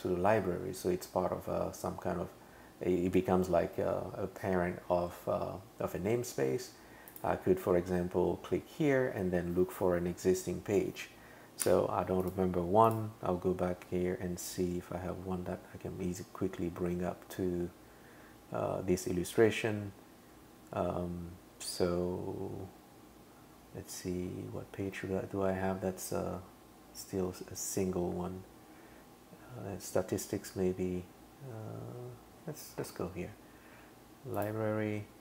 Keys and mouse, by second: 7.1 click, 34.4 click.